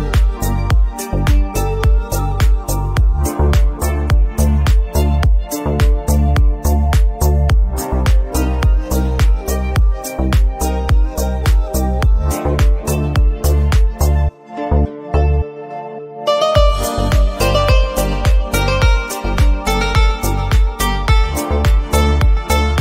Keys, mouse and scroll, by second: 0.0 a, 0.4 Tab, 0.6 ctrl+z, 0.7 ctrl+z, 0.9 ctrl+z, 1.3 q, 1.5 click, 1.7 middle click, 2.0-2.5 scroll up 2, 2.1 middle click, 2.5 middle drag, 2.7 Tab, 3.0 alt+click, 3.9 scroll down 2, 4.0 click, 4.1-4.6 middle drag, 4.6 scroll up 1, 4.6 middle drag, 4.9 scroll down 1, 5.0 shift+middle click, 5.4 click, 5.7-7.6 typing, 5.9 middle drag, 6.2 drag, 6.3 middle click, 6.7 click, 6.9 middle drag, 7.1-7.4 drag, 7.5 click, 8.0 click, 8.2 middle click, 8.3 click, 8.7 middle click, 9.0 scroll down 1, 9.1 click, 9.4 q, 9.7-10.4 shift+middle drag, 10.4 scroll down 2, 10.5 shift+middle click, 10.6 scroll up 3, 10.7 shift+middle click, 10.9 click, 11.2 q, 11.3 middle drag, 11.6 q, 11.8 click, 12.1 middle click, 12.2 scroll down 2, 12.4 shift+middle click, 12.7 click, 12.9 scroll down 1, 13.0 shift+middle click, 13.5 click, 14.0 q, 14.2 click, 14.3-14.9 middle drag, 15.0 scroll down 2, 15.3-16.1 shift+middle drag, 17.3 scroll up 2, 17.4 shift+middle click, 17.6 middle drag, 17.8 click, 18.0 q, 18.1 middle drag, 18.3 drag, 18.4 scroll down 2, 18.5 shift+middle click, 18.6-19.0 scroll up 4, 18.7 shift+middle click, 18.8 click, 19.0 Tab, 19.6 alt+click, 20.1 g, 21.7 scroll down 2, 21.7 Tab, 21.9 click, 22.4-22.8 middle drag.